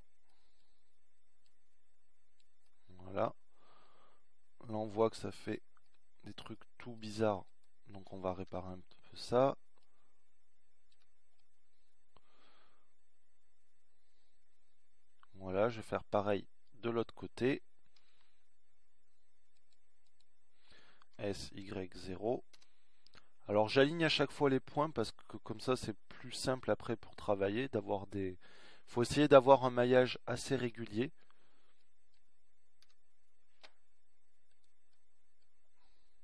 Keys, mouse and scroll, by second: 3.0-4.3 middle drag, 6.0-8.1 middle drag, 9.4-10.6 middle drag, 10.7 z, 12.8 z, 18.8 ctrl+r, 21.8 s, 28.3-30.7 middle drag, 32.8 z.